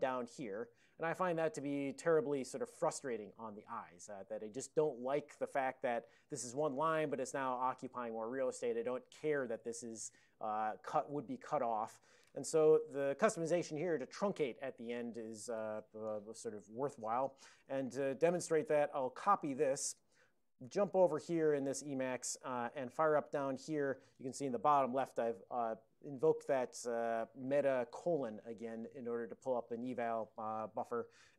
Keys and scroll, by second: 12.8 super+j, 17.3 ctrl+a, 17.6 ctrl+space, 18.0 ctrl+alt+f, 19.5 alt+w, 20.7 super+j, 23.6 alt+:.